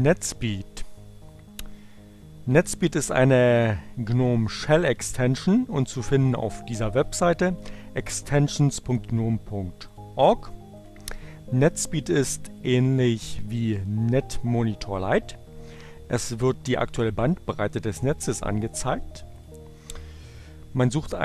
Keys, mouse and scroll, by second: 5.4-7.6 drag, 8.0-10.0 drag, 10.5 click, 11.0 click, 18.4 click.